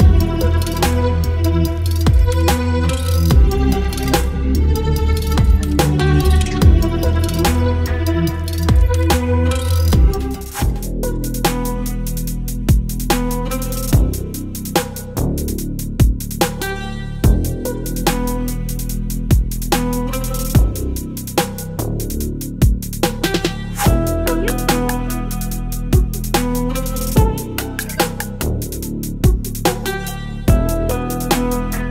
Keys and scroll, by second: 9.7 ctrl+d, 12.9 space.